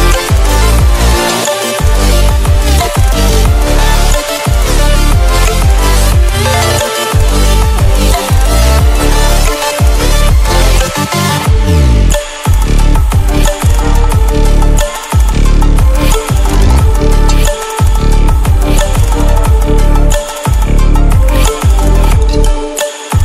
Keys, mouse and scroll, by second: 0.2 scroll up 1, 1.0-12.5 drag, 13.6 alt+click, 14.5-14.8 scroll down 1, 16.3 click, 17.0 scroll down 1, 17.9-19.1 scroll up 1, 19.1-19.9 scroll down 1, 19.9-20.2 scroll up 1, 20.4 scroll down 1, 21.7-22.6 scroll up 1, 23.1-23.2 drag.